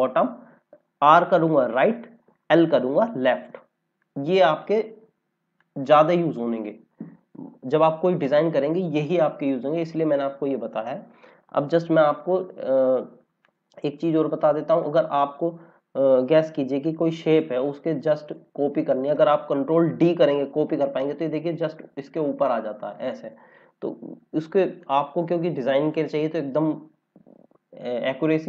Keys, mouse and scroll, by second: 3.9 click, 4.5 scroll down 1, 5.5 click, 13.4 click, 16.4 Delete, 20.1 ctrl+d, 22.9 click, 26.0 scroll up 1.